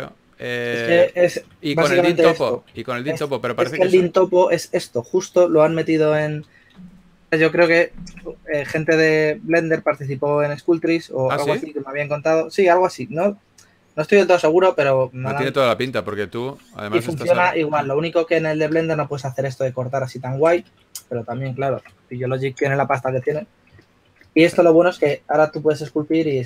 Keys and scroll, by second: 1.7 shift+f, 6.7 super+z, 6.9 super+z, 7.6 super+z, 21.0 super+z, 21.2 super+z, 24.7 s, 25.8 3.